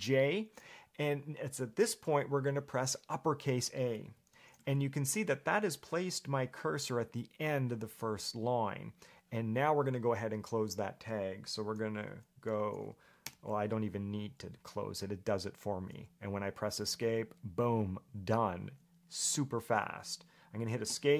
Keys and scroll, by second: 0.0-0.6 typing, 4.5 shift+a, 12.2 <, 13.4 /, 17.2 Escape.